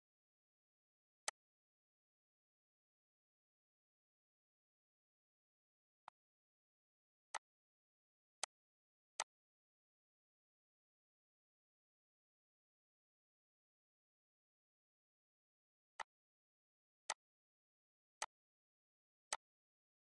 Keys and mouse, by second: 1.1 click, 5.9 click, 6.7 ctrl+c, 7.2 click, 8.2 click, 9.0 click, 15.8 click, 16.5 ctrl+c, 16.9 click, 19.2 click.